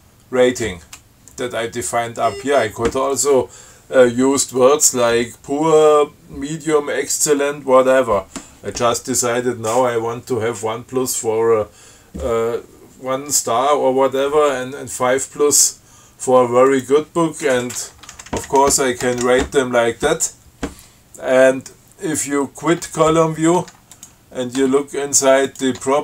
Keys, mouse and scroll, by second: 2.1-2.8 scroll up 4, 15.4 scroll down 2, 17.0 click, 18.5 shift+Right, 23.0 q, 24.2 click, 24.9 Tab, 25.8 click.